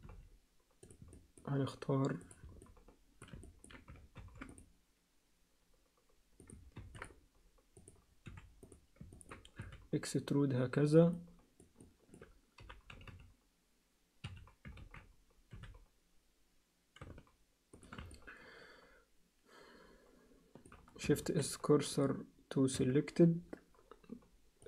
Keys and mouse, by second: 1.1 alt+middle click, 2.2 click, 2.6 alt+middle click, 3.4 ctrl+middle click, 4.2 ctrl+r, 6.7 ctrl+r, 8.2 3, 8.7 click, 9.1 ctrl+middle click, 9.7 e, 11.1 alt+middle click, 11.8 alt+middle click, 12.6 g, 14.8 ctrl+z, 15.5 e, 18.1-20.2 alt+middle drag, 20.2 alt+click, 21.2 shift+s, 22.8 Tab.